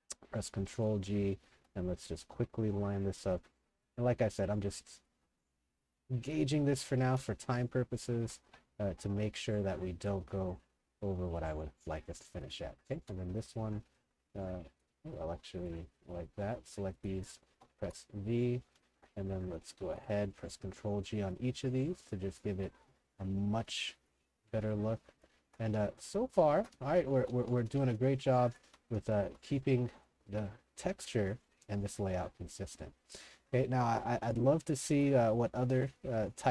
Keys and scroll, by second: 1.1-2.1 typing, 2.3 ctrl+g, 6.3-7.6 typing, 8.2 ctrl+g, 12.9 a, 13.4 2, 17.2-19.0 typing, 19.9 ctrl+g, 22.6 ctrl+g, 24.5-29.2 typing, 35.5 w, 35.8 w.